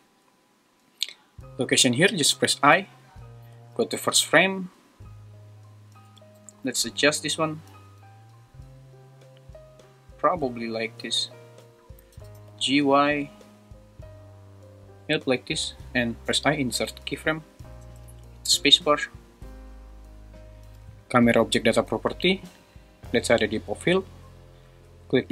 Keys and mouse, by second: 2.3 i, 3.3 shift+Left, 6.0 g, 6.4 z, 12.1 g, 12.4 y, 16.3 i, 17.8 space.